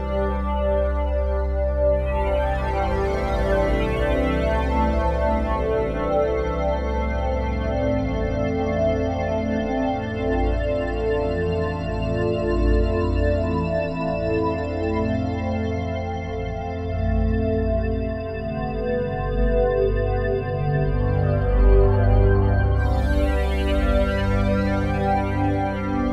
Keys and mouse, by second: 1.2 alt+p, 2.3 Return, 3.7-6.0 shift+drag, 7.9 a, 9.4 alt+r, 9.7 alt+g, 10.9-12.2 alt+drag, 12.4-13.0 ctrl+alt+drag, 13.1-15.1 alt+drag, 15.5 ctrl+p, 16.7 Down, 17.1 Return, 18.0-20.1 alt+drag, 20.1 r, 20.4 x, 20.5 x, 23.6 Escape, 25.0-26.1 drag.